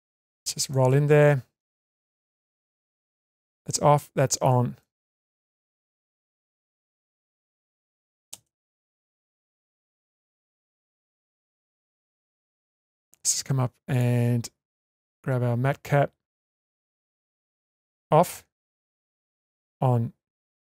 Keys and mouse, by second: 0.7 middle click, 3.4 click, 4.8-5.5 shift+middle drag, 6.2-7.2 middle drag, 7.7 shift+space, 9.1-9.7 shift+middle drag, 10.1-11.2 ctrl+middle drag, 11.6-12.8 shift+middle drag, 13.9-15.9 drag, 17.6 click, 19.5 click, 20.4 click.